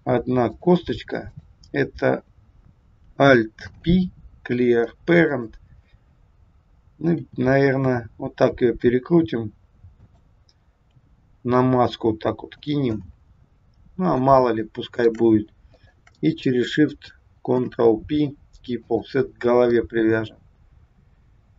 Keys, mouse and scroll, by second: 1.3 click, 3.6 alt+p, 7.3 r, 10.9 g, 13.5-13.9 scroll up 4, 14.3 shift+scroll down 1, 14.4 shift+middle click, 15.7 shift+click, 17.6 ctrl+p, 19.2-19.7 scroll down 3, 19.7 middle click.